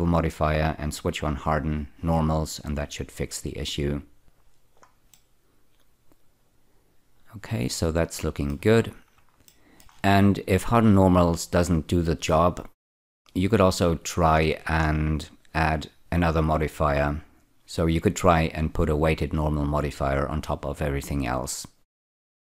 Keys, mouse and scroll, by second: 2.0 click, 4.3 click, 5.1-8.1 middle drag, 8.8-9.2 scroll down 3, 9.5 shift+middle click, 14.4-16.1 scroll up 8, 16.1 click, 21.7 scroll up 1, 22.0 middle click.